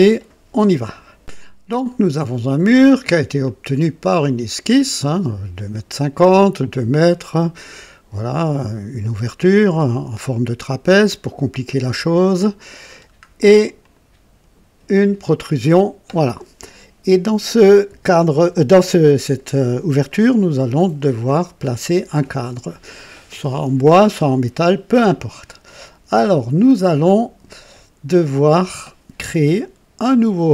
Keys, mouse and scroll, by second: 2.7 click, 3.4 click, 12.2-12.8 scroll up 2, 12.8-13.2 scroll down 2, 13.8 click, 20.0 click, 21.3 click, 25.4-26.7 drag, 27.7 click.